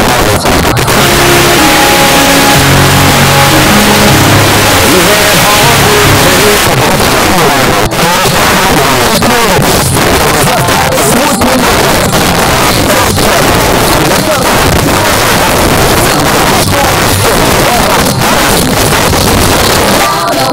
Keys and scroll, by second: 6.6 Page_Down.